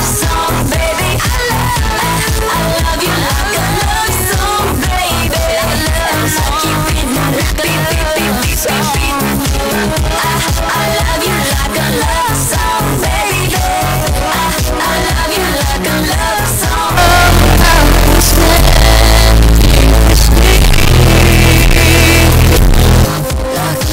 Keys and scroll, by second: 23.1 Page_Down.